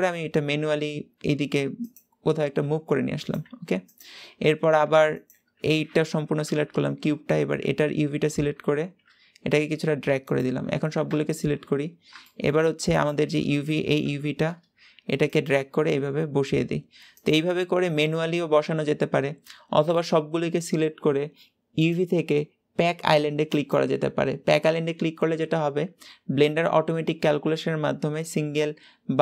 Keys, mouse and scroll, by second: 2.7 g, 3.3 s, 4.3 Tab, 4.7 Tab, 5.1 click, 6.3 l, 7.5 a, 8.5 g, 10.9 a, 12.9 click, 13.9 l, 14.6 s, 15.3 g, 15.9-19.7 right drag, 19.7 a, 23.5 click.